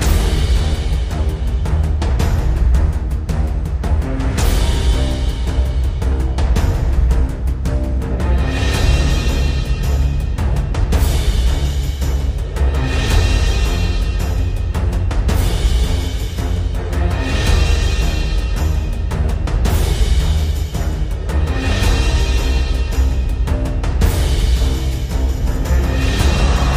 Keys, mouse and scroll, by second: 0.4-2.1 scroll down 1, 2.5 scroll down 1, 5.5 click, 6.3-7.8 scroll up 1, 8.6-9.9 scroll down 1, 10.8-11.5 scroll down 1, 11.5-15.0 scroll down 1, 16.6-18.9 drag, 26.3 scroll down 1.